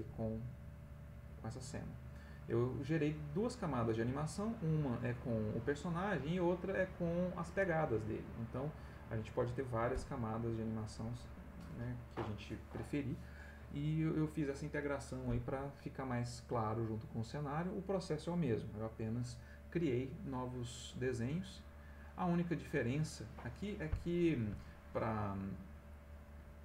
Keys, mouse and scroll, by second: 21.8 click, 22.8 click, 24.3 click, 24.7 middle click.